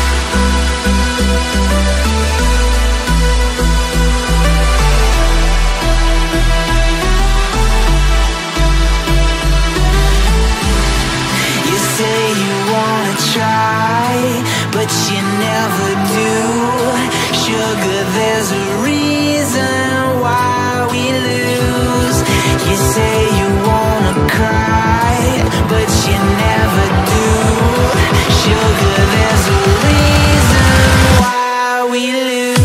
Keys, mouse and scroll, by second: 3.2 ctrl+r, 4.3 Tab, 5.2 Tab, 5.9 a, 6.8 ctrl+r, 13.7 Tab, 14.1 click, 14.8 click, 15.6 Tab, 16.6 click, 17.3 middle click, 18.3-19.5 scroll down 6, 19.5-20.4 scroll up 4, 23.0 KP_1, 23.9 Tab, 24.8-25.2 scroll up 1, 25.2 s, 28.5 Tab, 29.0-29.4 scroll up 1, 29.5 middle click, 30.1 scroll up 1, 30.4-31.4 scroll down 3, 31.4 KP_3, 31.9 KP_1.